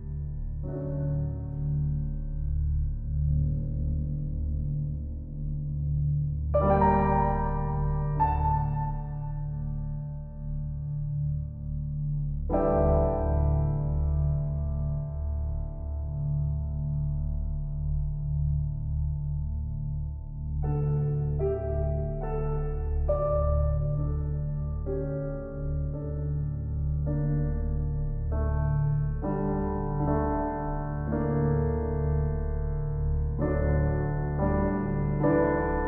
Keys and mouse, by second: 1.2-12.2 drag, 5.1-5.8 typing, 12.8 click, 13.0 click, 13.6 click, 15.9-17.1 typing, 16.1 right click, 16.6 click, 19.1 click, 21.5 click, 22.4-25.0 typing, 23.3-23.8 ctrl+alt+drag, 24.1-24.7 ctrl+alt+drag, 25.3 alt+shift+click, 26.1-28.1 ctrl+alt+drag, 28.1 typing, 28.1 alt+a, 29.2-31.8 ctrl+alt+drag, 32.0-33.0 ctrl+alt+drag, 32.0 typing.